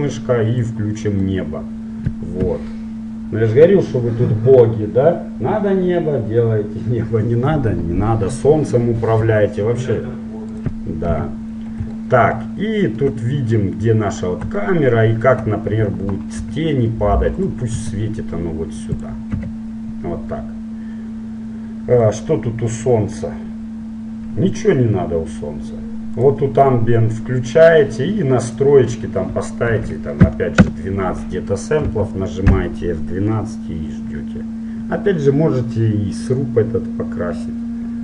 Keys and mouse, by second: 0.8-2.7 drag, 2.7 KP_1, 9.4 r, 11.3 KP_7, 12.2 middle click, 16.6 g, 18.0 r, 19.4 KP_1, 26.3-28.3 drag, 28.7-30.3 drag, 32.2 F12.